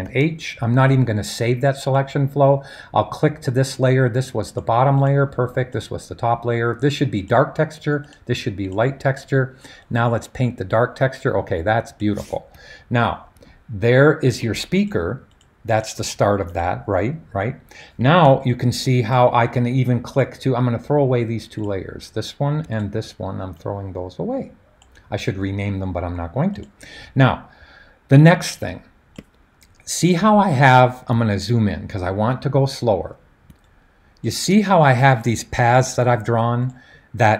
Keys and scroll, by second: 0.0 super+h.